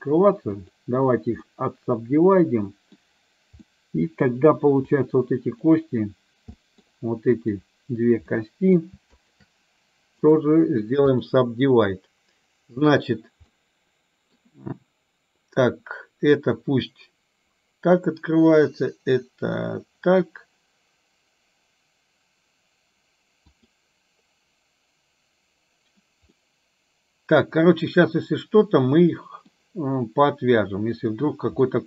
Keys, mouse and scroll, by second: 1.6-3.1 middle drag, 3.7 middle click, 4.9 click, 6.7 middle click, 7.4 click, 8.3 middle click, 9.3 shift+click, 10.5 right click, 13.7 middle click, 23.7 click, 26.4-29.5 middle drag, 31.7-31.8 middle drag.